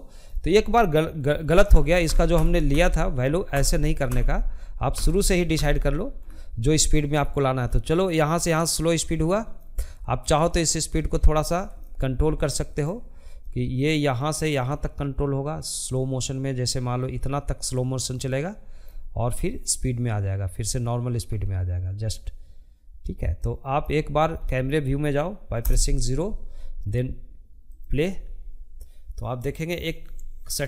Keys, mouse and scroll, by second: 0.2 ctrl+z, 0.4 ctrl+z, 1.6 ctrl+z, 2.2 ctrl+z, 3.1 ctrl+z, 3.6 ctrl+z, 5.6-10.1 drag, 10.1 ctrl+z, 10.8-16.0 drag, 17.8-20.7 drag, 22.5-23.7 middle drag, 23.7 KP_0, 25.8-30.6 drag.